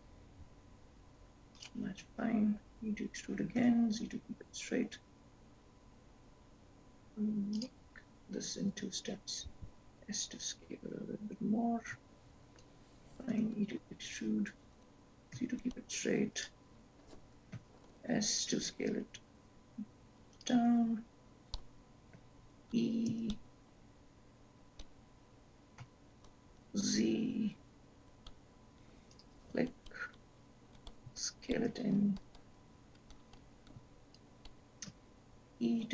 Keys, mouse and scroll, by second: 3.5 e, 11.8 s, 15.0 e, 20.1 s, 24.7 e, 32.1 s, 35.7 e.